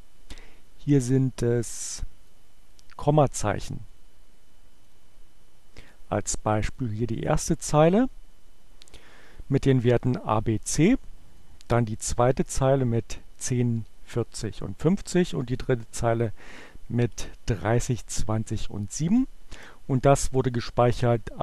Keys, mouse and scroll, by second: 1.7-2.8 drag, 3.5 click, 5.0 click, 6.7 click, 11.5 click, 15.6-16.6 drag, 19.1 click.